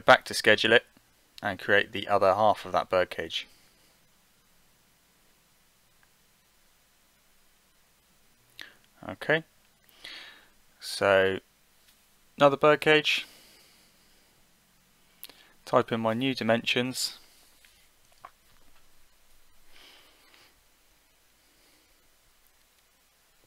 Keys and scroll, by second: 16.2 7, 19.4 Delete, 20.5 6, 21.5 Delete.